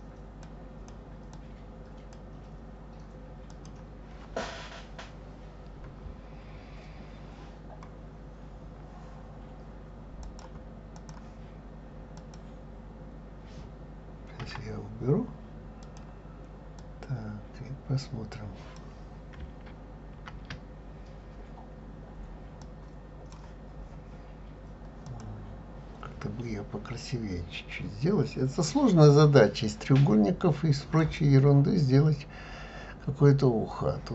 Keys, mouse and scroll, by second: 0.4 click, 1.3 click, 3.5 click, 10.3-12.3 drag, 14.4 Delete, 15.8 click, 16.8-19.8 drag, 20.2 ctrl+z, 22.6-25.2 drag, 31.0 click.